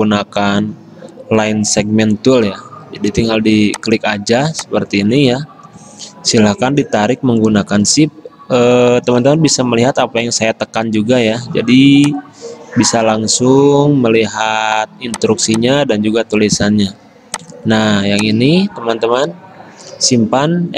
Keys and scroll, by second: 16.7 d.